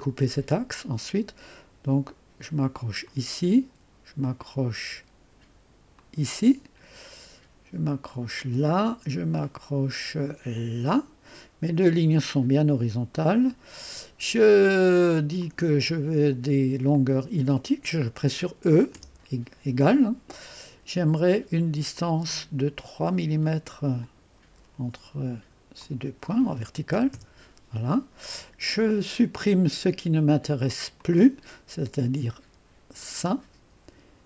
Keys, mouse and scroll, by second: 0.0 click, 3.0 click, 5.9 click, 8.4 click, 10.5 click, 13.1-15.4 right drag, 15.4 click, 16.9 click, 21.9 click, 22.3 click, 24.0 click, 25.8 click, 25.8 typing, 27.0 typing, 27.1 Return, 31.0 click, 33.0 click.